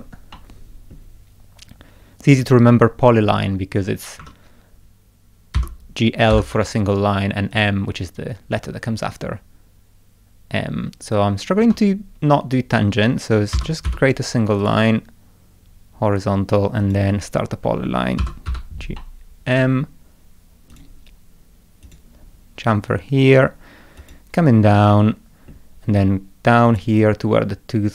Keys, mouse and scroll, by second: 0.3 middle click, 2.3 click, 4.2 Escape, 5.6 g, 6.3 m, 7.5 click, 11.6 Escape, 13.5 g, 13.9 l, 14.6 click, 16.8 click, 18.2 g, 18.5 m, 19.0 middle click, 20.7 click, 21.8 click, 24.0 click, 24.9 middle click, 26.7 click.